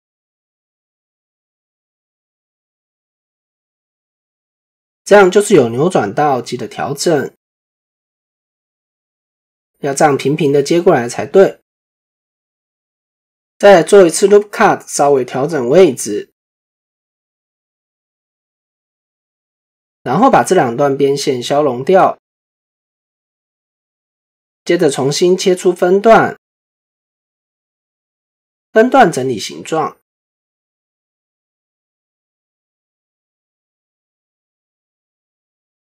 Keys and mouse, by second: 7.8 click, 8.9 click, 9.3-10.9 drag, 11.4 shift+middle click, 15.0-17.9 drag, 18.6 shift+middle click, 19.6 alt+click, 21.3 x, 28.3 click, 29.2 click, 31.2 click, 31.7-32.9 drag, 34.2 alt+click.